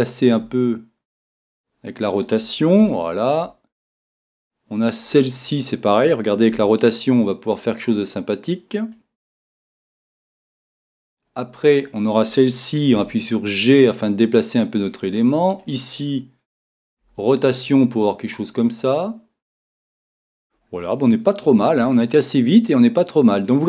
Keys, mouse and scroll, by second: 0.4 r, 2.1 click, 2.9-4.9 middle drag, 6.5-8.1 right drag, 6.5 r, 8.9 click, 10.3-12.8 middle drag, 12.8-14.4 right drag, 13.0 g, 14.6 click, 16.2-18.4 right drag, 18.5 click, 20.3-23.6 middle drag.